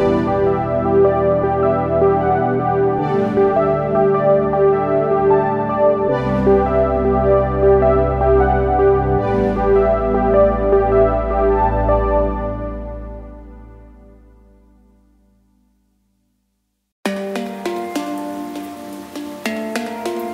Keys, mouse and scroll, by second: 0.1 click, 0.6 click, 3.4 g, 13.1 click, 18.7 g.